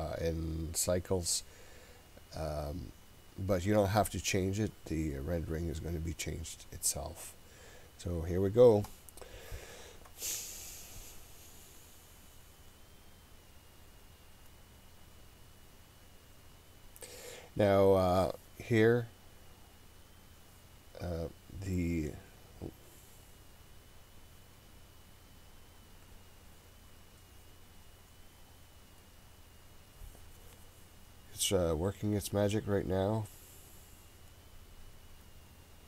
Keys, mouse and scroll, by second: 8.9-35.8 drag.